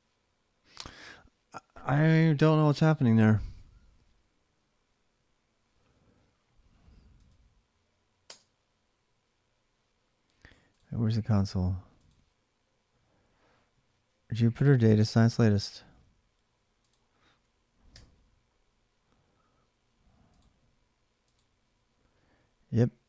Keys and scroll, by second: 8.0 space, 17.7 BackSpace.